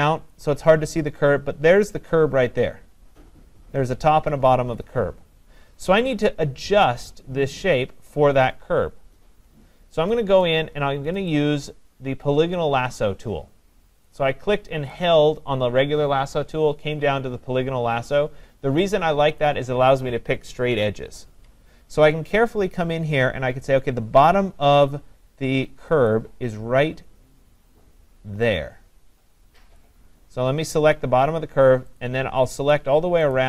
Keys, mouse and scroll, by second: 0.2-1.7 scroll, 0.3 click, 14.1 click, 19.4 click, 26.1 click, 29.8 click, 32.0 click, 32.8 click, 33.3 click.